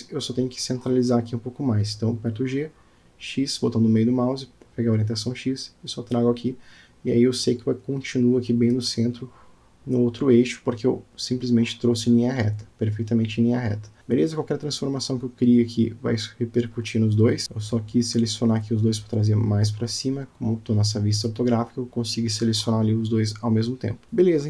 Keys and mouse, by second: 2.0-2.5 alt+middle drag, 3.8 KP_Decimal, 10.6-11.7 middle drag, 13.6-14.0 drag, 14.2 click, 15.6-16.5 drag, 17.8 click, 18.7 click, 19.6-20.1 drag, 21.4 g.